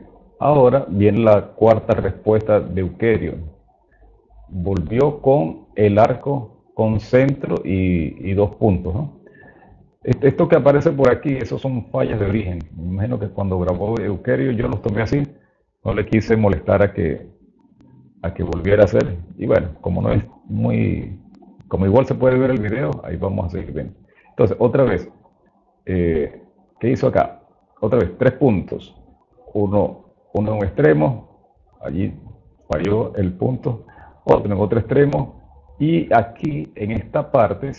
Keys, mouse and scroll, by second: 0.0 click, 1.8 click, 3.0 click, 4.5 click, 26.3 click, 27.1 click, 31.5 click, 34.1 click, 36.2 click.